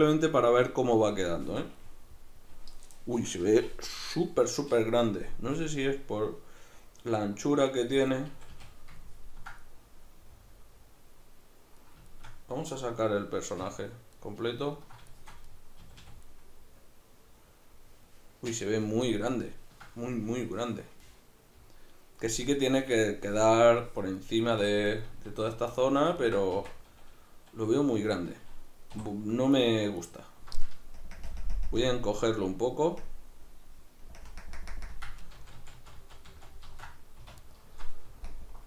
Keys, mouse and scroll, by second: 1.5 Tab, 1.8-7.6 middle drag, 7.6 right click, 8.3 a, 8.8-24.9 ctrl+middle drag, 13.7 \, 15.8 a, 24.9-25.3 right drag, 25.3 alt+q, 25.8-29.5 shift+middle drag, 26.6 Tab, 28.9 3, 29.5 alt+right click, 30.0 alt+right click, 31.0 ctrl+KP_Add, 34.4 ctrl+KP_Subtract, 35.4 ctrl+z, 37.4 alt+shift+right click, 38.3 alt+KP_Subtract.